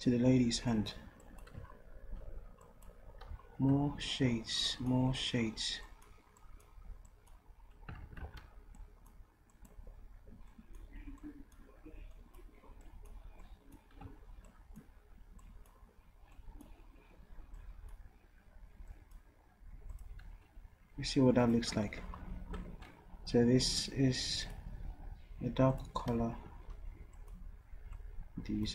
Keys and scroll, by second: 8.1 ctrl+z, 8.2 ctrl+z, 26.1 v.